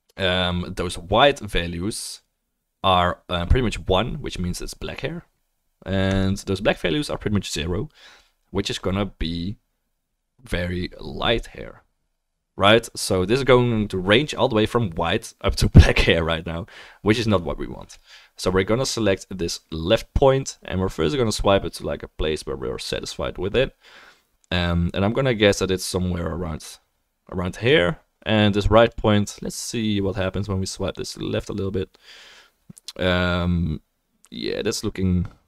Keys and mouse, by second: 1.4 click, 1.4 middle click, 2.2 click, 2.2 middle click, 2.2 right click, 7.6-26.2 drag, 28.0-30.1 drag, 28.0-30.1 right drag, 30.3 click, 30.3 right click, 34.4 click, 34.4 right click.